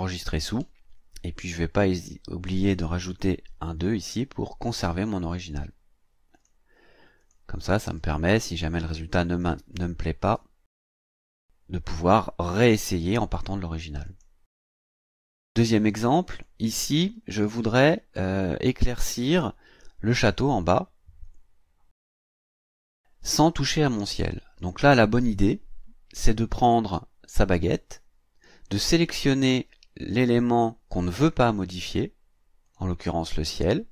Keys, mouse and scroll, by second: 0.4 click, 1.9 click, 3.2 KP_2, 6.3 click, 7.2 click, 9.3 click, 10.3 BackSpace, 10.7 KP_5, 14.0 click, 16.3 click, 17.5 ctrl+scroll up 2, 27.5 click, 32.6 click.